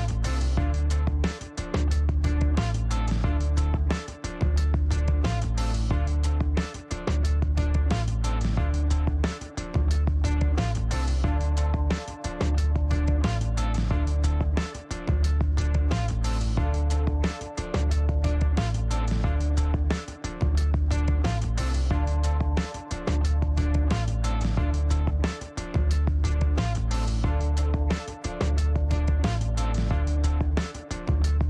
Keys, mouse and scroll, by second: 0.6 click, 1.1 right click, 1.6 scroll up 1, 2.9 scroll up 1, 3.2 middle click, 4.4 click, 5.5 click, 9.8 click, 12.6 click, 14.1 click, 14.6 right click, 15.3 right click, 15.6 scroll up 1, 16.0 click, 16.6 click, 17.4 click, 18.8 right click, 19.3 click, 19.9 click, 20.8 click, 22.4 click, 23.1 scroll up 2, 25.3 click, 26.7 click, 27.8-28.8 typing, 29.4 Return, 31.2 click.